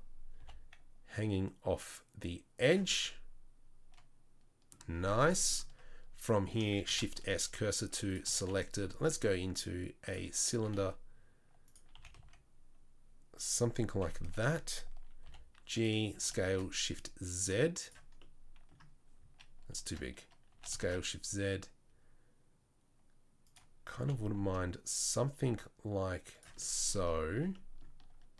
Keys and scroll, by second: 0.4 g, 6.9 shift+s, 8.3 shift+a, 10.6 s, 11.9 s, 14.0 KP_3, 15.2 g, 16.1 s, 20.5 s, 24.0 g, 27.3 Tab, 28.1 Tab.